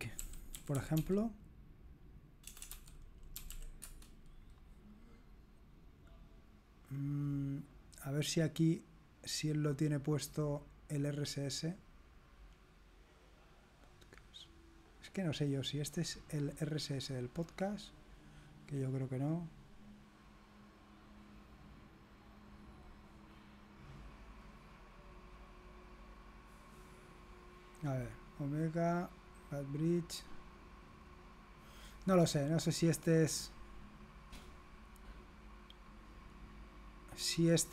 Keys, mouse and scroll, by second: 0.0-5.5 typing, 8.1 click, 8.8 click, 25.0 click, 28.0-31.2 scroll down 1, 32.1-33.7 scroll down 1, 35.8-37.0 scroll down 1, 37.1-37.7 scroll down 1.